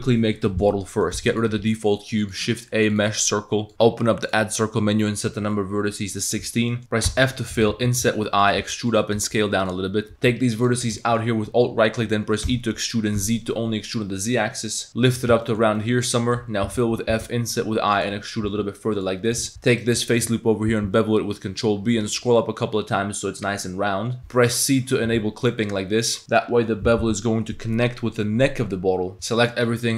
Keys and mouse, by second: 0.5 click, 0.9 click, 1.2 x, 1.6 shift+a, 4.3 drag, 6.4 Tab, 6.7 click, 7.1 f, 7.7 i, 8.7 e, 9.2 s, 10.6 alt+click, 11.0 shift+click, 12.5 e, 15.5 shift+click, 15.8-16.4 drag, 16.7 f, 17.1 i, 18.1 click, 18.5 e, 19.3 click, 19.7 alt+click, 20.1 click, 20.7 ctrl+b, 24.2 ctrl+b, 29.1 3, 29.1 a, 29.5 click, 29.8 click.